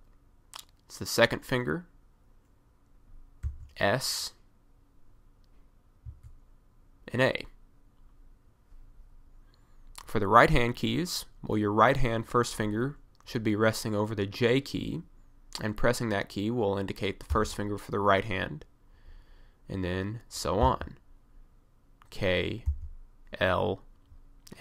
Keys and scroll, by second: 3.5 s, 6.1 a, 17.4 j, 20.7 k, 22.7 l.